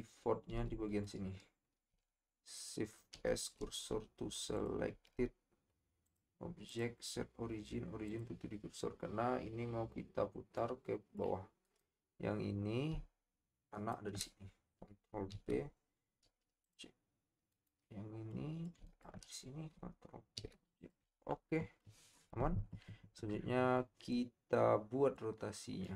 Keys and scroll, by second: 0.7 Tab, 3.1 shift+s, 4.9 Tab, 15.3 ctrl+p, 20.3 ctrl+shift+p.